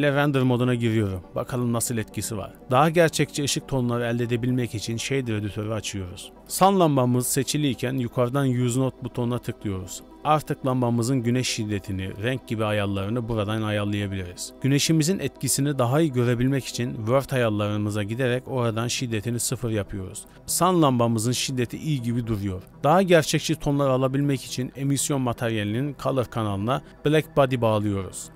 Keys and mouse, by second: 2.3-3.5 drag, 7.3 click, 10.2 click, 11.3 KP_Decimal, 12.6 middle click, 13.3-14.4 drag, 14.6-15.9 middle drag, 16.4-17.3 middle drag, 18.1-23.2 middle drag, 23.6 middle click, 24.6 click, 24.7-25.1 middle drag, 25.1 click, 26.3 shift+a.